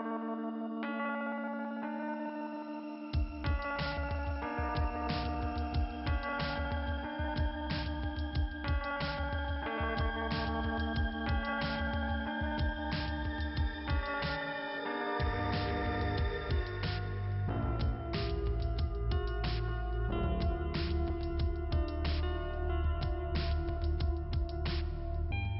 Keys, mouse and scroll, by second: 4.4 middle click, 9.3-10.3 scroll up 1, 10.3-10.7 scroll down 1, 12.9-13.7 scroll up 2, 15.3-16.1 scroll down 1, 18.3 middle click, 18.6 middle click, 23.7 scroll down 1, 24.8 scroll down 1.